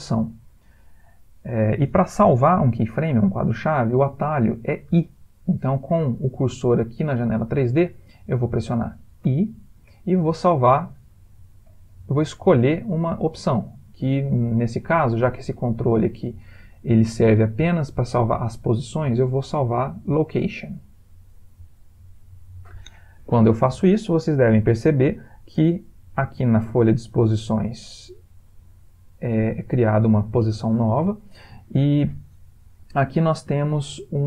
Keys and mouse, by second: 9.6 i, 32.9 middle click.